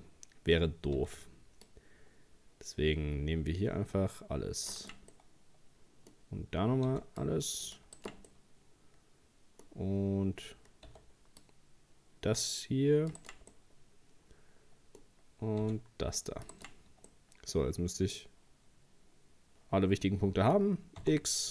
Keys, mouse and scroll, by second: 1.0 c, 5.1-6.9 middle drag, 6.9 c, 8.3-10.9 middle drag, 10.9 c, 13.5-15.6 middle drag, 15.6 c, 17.1-20.1 middle drag, 21.0 x.